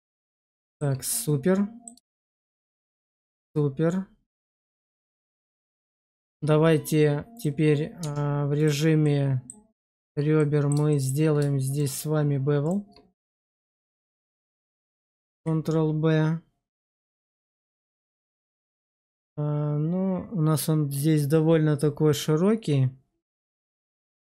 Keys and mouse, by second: 0.6 shift+middle click, 1.0 middle click, 2.0 shift+middle drag, 2.7-5.1 middle drag, 5.4 shift+middle click, 6.0 shift+middle drag, 7.9 Tab, 8.5 right click, 8.9 middle click, 10.2 middle click, 10.8 shift+middle click, 13.1 middle click, 13.6 shift+middle click, 15.2 ctrl+b.